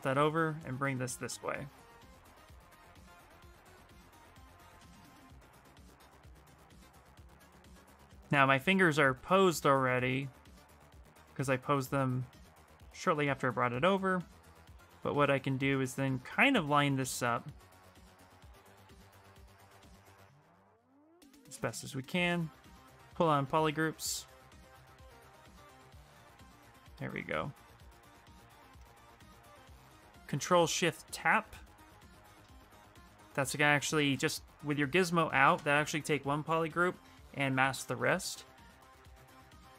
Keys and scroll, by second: 21.9 shift+f.